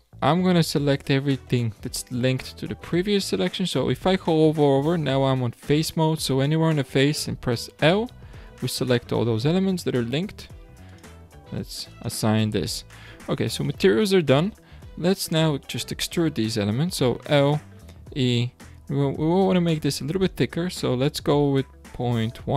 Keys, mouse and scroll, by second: 7.7 l, 10.8 click, 11.9-13.1 drag, 13.1 alt+a, 13.6-14.2 middle drag, 14.2-14.9 scroll down 1, 14.9 scroll up 3, 17.2 l, 18.0 e.